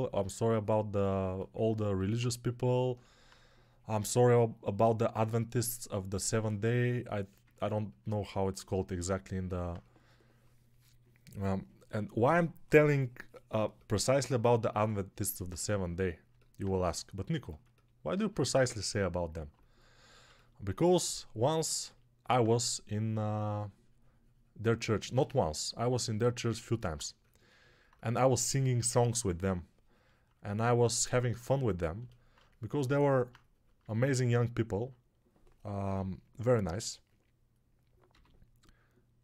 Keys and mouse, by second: 34.7-35.8 drag, 34.7-35.8 middle drag, 34.7-35.8 right drag, 35.8-36.5 ], 38.0 g.